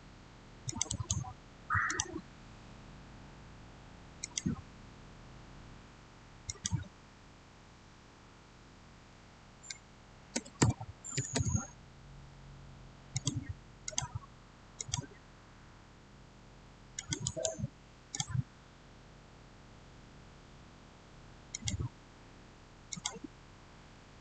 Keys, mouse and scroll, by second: 0.8 right click, 1.8 click, 4.1 click, 6.4 click, 10.0-11.7 typing, 13.0 click, 16.8 click, 17.1 right click, 18.0 click, 21.4 click.